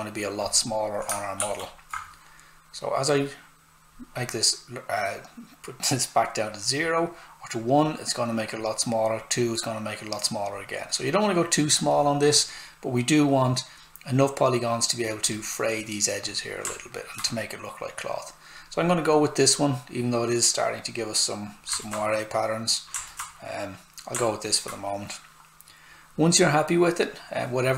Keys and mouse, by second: 0.4 click, 1.3 shift+f, 3.0 click, 6.8 click, 12.8 click, 16.7 alt+right click, 21.6 alt+Num_Lock, 21.6 alt+right click.